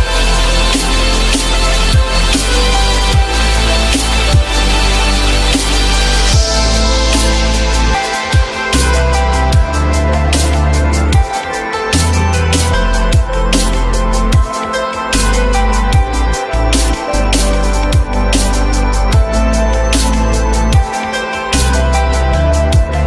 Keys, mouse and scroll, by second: 0.0 q, 1.1 alt+middle click, 3.2 F4, 7.3 typing, 8.7 F3, 17.9 s, 20.8 ctrl+z.